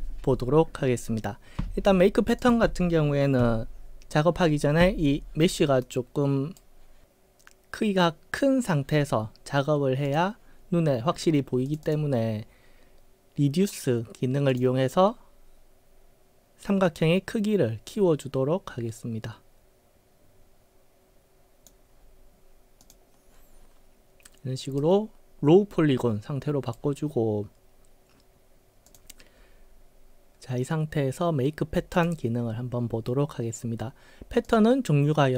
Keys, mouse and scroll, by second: 2.4 click, 3.4 w, 5.9-6.6 right drag, 10.1 click, 11.7 click, 11.9 click, 14.5 click, 16.9-21.7 drag, 22.9 click, 24.9-26.8 right drag, 29.0 click, 32.0 click, 34.5 click.